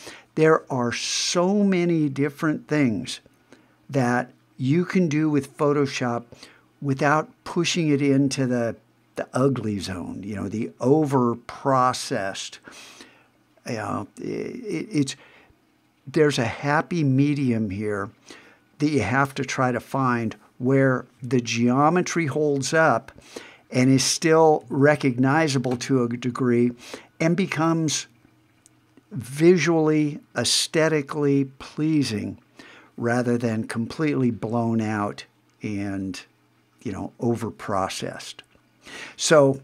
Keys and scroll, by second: 24.6 super+`.